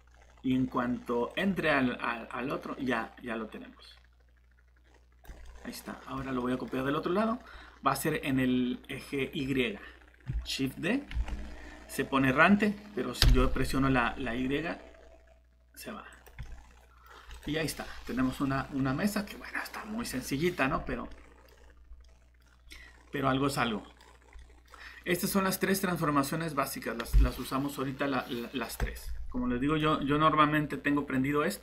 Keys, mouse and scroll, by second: 1.3 click, 5.4 middle click, 10.3-11.2 typing, 13.2 y, 16.1 click, 16.4 middle click, 17.3 click, 17.8 middle click, 19.8 scroll down 1, 21.1 middle click, 21.5 scroll up 1, 22.0 middle click, 24.2 scroll down 1, 24.4 middle click, 28.8 click.